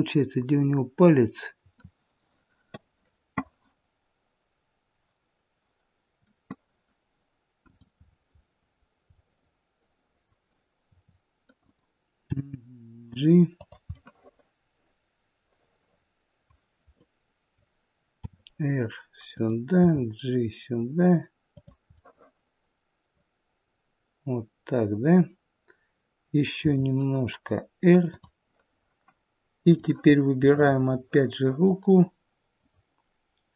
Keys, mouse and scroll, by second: 0.4-1.4 scroll down 1, 1.5 r, 7.9-9.0 scroll down 4, 9.0 middle click, 10.8 r, 13.9 middle click, 13.9 g, 18.1 r, 19.6 g, 21.8 middle click, 26.5 r, 30.4 click, 30.4 middle click, 32.5 click.